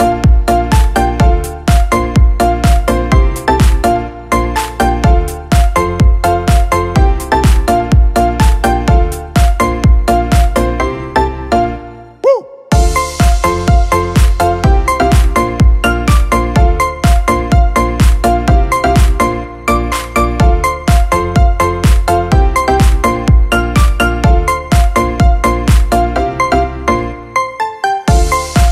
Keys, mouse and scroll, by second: 0.0 shift+click, 4.8 ctrl+z, 17.7 space.